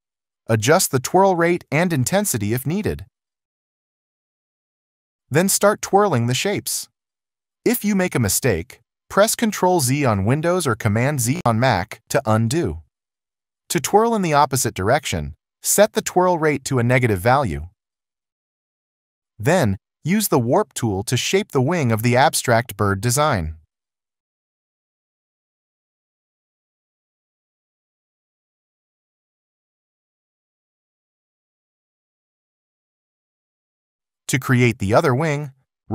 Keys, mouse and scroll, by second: 5.8 ctrl+z, 11.6 ctrl+z, 24.0 alt+click, 28.1 alt+click, 31.6 ctrl+z, 32.7 alt+click.